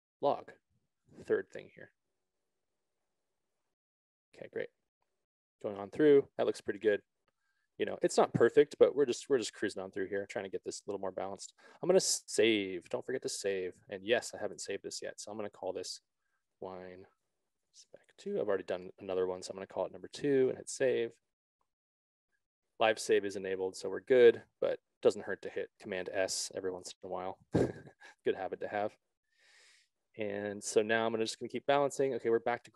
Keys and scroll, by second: 12.7 ctrl+z, 16.5 shift+w, 16.7 shift+e, 17.9 shift+s, 27.1 s.